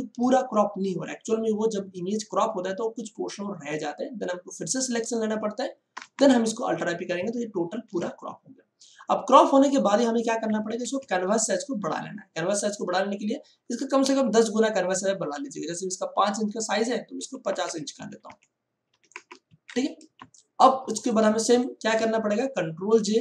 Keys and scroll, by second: 5.9 alt+i, 6.1 alt+p, 7.7 ctrl+d, 10.7 ctrl+alt+c, 17.1 5, 17.5 0, 18.8 5, 19.1 0, 19.4 Return, 20.1 ctrl+space, 21.2 space, 22.9 ctrl+j.